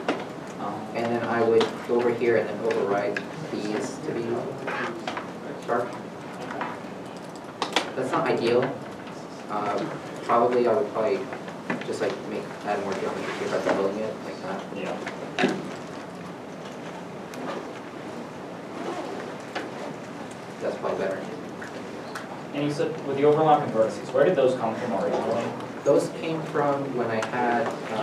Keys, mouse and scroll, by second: 0.5 scroll, 0.5 Tab, 0.9 Tab, 1.6 shift+middle click, 2.2 alt+click, 2.9 alt+s, 4.1 alt+a, 5.1 alt+click, 9.8 alt+s, 10.5 scroll, 10.8 middle click, 11.1 scroll up 1, 11.2 Tab, 12.1 alt+click, 12.7 ctrl+b, 15.1 a, 16.0 ctrl+e, 18.7 ctrl+i, 20.0 3, 20.2 Return, 21.5 scroll down 1, 22.1 scroll down 1, 23.2 middle click, 25.5 Tab, 25.8 scroll, 25.8-26.2 scroll up 1, 27.3 scroll, 27.4 2.